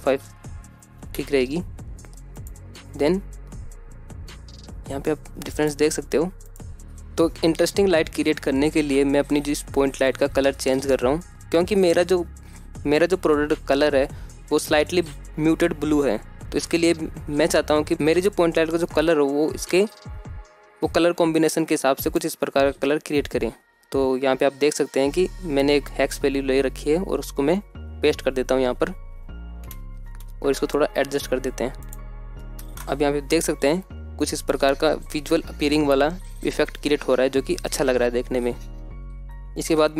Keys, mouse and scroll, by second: 1.0 click, 4.0-8.4 drag, 9.8 ctrl+alt+F9, 10.1-13.1 drag, 13.5-16.9 drag, 31.2 z, 33.0-33.7 drag, 35.1 alt+shift+z.